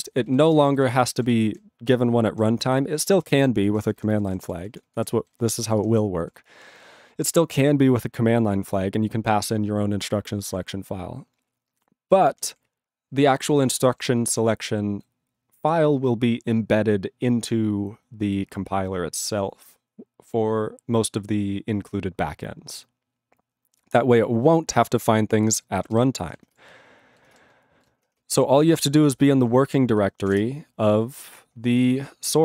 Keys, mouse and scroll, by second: 0.2 ctrl+g, 0.4 ctrl+n, 0.5 ctrl+space, 0.6 ctrl+n, 1.2 ctrl+g, 1.4 ctrl+p, 1.6 ctrl+n, 2.1 ctrl+n, 2.5 ctrl+p, 3.0 ctrl+p, 3.5 ctrl+n, 3.6 ctrl+space, 3.7 ctrl+n, 4.2 ctrl+g, 4.3 ctrl+space, 4.4 ctrl+p, 4.9 ctrl+g, 5.0 ctrl+n, 5.6 ctrl+g, 5.7 ctrl+space, 5.8 ctrl+p, 6.2 ctrl+g, 6.7 ctrl+p, 8.7 ctrl+n, 10.6 ctrl+p, 13.9 alt+>, 14.7 ctrl+p, 15.9 ctrl+space, 16.0 ctrl+p, 19.8 ctrl+p, 25.9 ctrl+g, 27.5 ctrl+g.